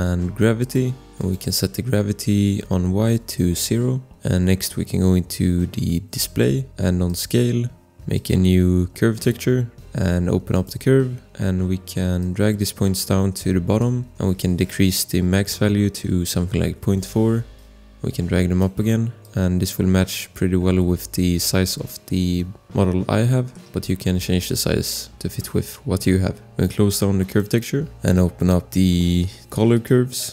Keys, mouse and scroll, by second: 0.6 click, 1.8 click, 3.1 9, 3.3 Return, 3.6 click, 3.7 click, 4.1 scroll, 12.4 click, 13.7 click, 14.2 click, 16.2-17.1 typing, 17.5 click, 19.2 click, 20.1 click, 23.5 click, 24.5 click, 26.4-27.2 scroll, 27.2 click.